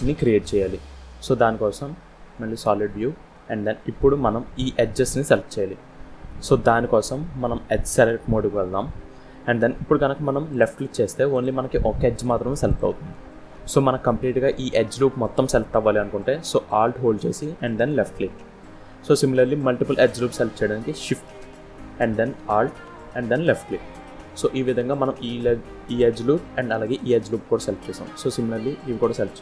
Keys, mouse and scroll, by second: 1.0 scroll down 2, 2.1 z, 3.0 scroll down 1, 3.2 middle click, 5.6-6.0 scroll up 2, 6.2 middle click, 6.2 scroll down 1, 6.5-6.9 scroll up 1, 7.8 click, 10.4 click, 11.2 click, 12.0 click, 12.5 click, 13.0-13.5 scroll up 2, 17.6 alt+click, 18.5 scroll down 1, 19.5 middle click, 23.2 alt+shift+click, 27.5 middle click.